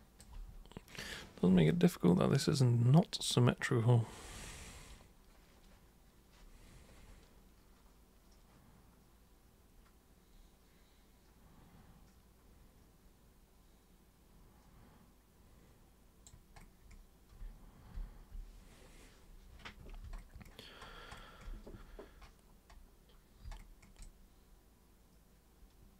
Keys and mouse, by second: 1.7-16.3 alt+super+drag, 24.0-25.9 alt+super+drag.